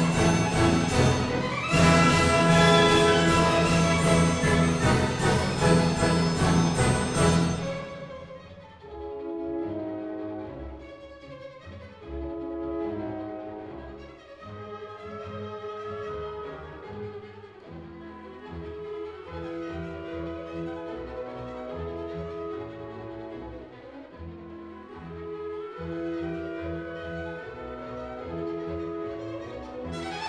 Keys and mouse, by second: 2.5 right click, 3.5 Tab, 6.8 click, 7.8 KP_Decimal, 11.2 ctrl+r, 13.1 click, 16.9 ctrl+r, 19.0 click, 19.6 ctrl+r, 20.9 click, 22.7 click, 23.2 ctrl+r, 24.2 click, 24.3 Tab.